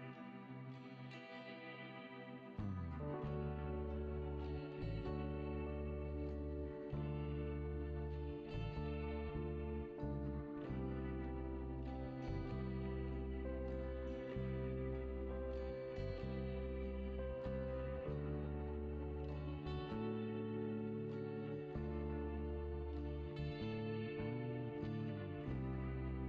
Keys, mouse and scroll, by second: 0.0 click, 0.8 r, 9.6 scroll down 4, 10.2 scroll up 4, 10.8 s, 13.6 click, 14.6 click, 16.8-18.0 drag, 18.0-20.1 scroll up 4, 20.8-21.9 scroll down 3, 21.9 KP_7, 23.0 click, 24.0 scroll up 5, 24.9 s.